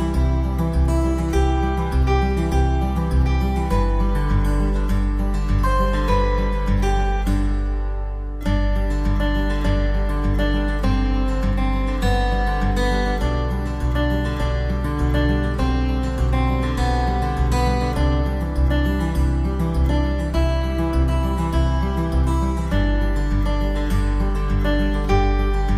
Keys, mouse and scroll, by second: 0.1 alt+middle click, 0.3 alt+middle click, 0.6 click, 1.9 alt+middle click, 2.0 alt+middle click, 2.1-2.9 typing, 2.6 click, 2.9 click, 3.0 alt+middle click, 3.6 alt+middle click, 3.9 click, 4.3 click, 4.5 alt+middle click, 4.7 alt+middle click, 5.0 click, 5.1 click, 5.4 ctrl+click, 5.7 ctrl+click, 6.0 ctrl+click, 6.4 alt+middle click, 6.5 alt+middle click, 7.1 click, 7.5 click, 8.6 click, 9.3 click, 9.5 alt+middle click, 9.6 alt+middle click, 10.0 click, 11.2 ctrl+click, 12.3 click, 12.5 alt+middle click, 12.7 alt+middle click, 13.0 click, 13.2 alt+middle click, 14.8 click, 16.4 alt+click, 16.6 alt+click, 16.8 alt+w, 17.2 middle click, 17.4 F3, 17.8 click, 18.0 middle click, 18.1 middle click, 18.2 F4, 18.5 click, 18.7 scroll up 1, 18.9 click, 19.1 click, 19.5 click, 19.7 click, 19.9 click, 20.3 Up, 20.8 ↕, 21.1 middle click, 21.3 click, 21.4 Down, 21.4 click, 22.3 Down, 22.7 middle click, 22.9 click, 23.2 click, 23.3 Down, 23.6 click, 24.3 middle click, 24.4 typing, 24.6 middle click, 25.1 click, 25.3 click, 25.4 Down.